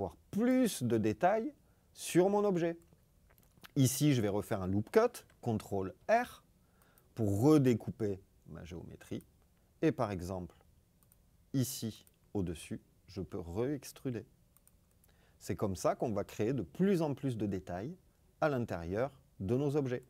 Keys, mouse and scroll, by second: 0.3 click, 5.9 ctrl+r, 6.7 click, 13.1 e, 14.5 click.